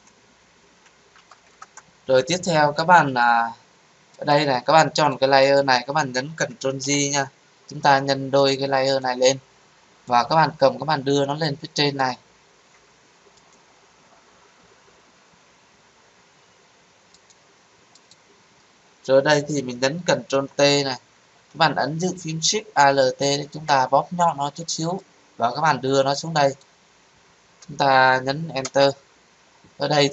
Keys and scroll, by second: 6.8 ctrl+j, 20.3 ctrl+t, 28.6 Return.